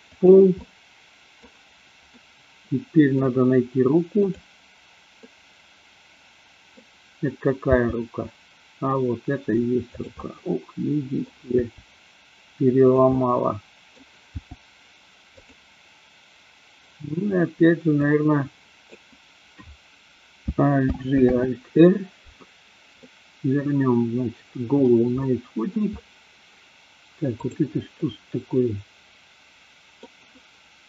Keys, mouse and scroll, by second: 0.2 click, 0.5 scroll up 1, 0.7-1.4 middle drag, 2.2 scroll up 1, 2.3-3.3 middle drag, 4.2 click, 5.3-6.8 middle drag, 7.7 g, 9.9 click, 10.2-11.3 middle drag, 11.7 g, 12.9 click, 13.2 scroll up 1, 13.3 middle click, 14.3 g, 15.4 click, 18.0 click, 20.8 alt+g, 21.3 alt+r, 22.9-24.8 middle drag, 25.2 middle click, 28.0-29.9 middle drag.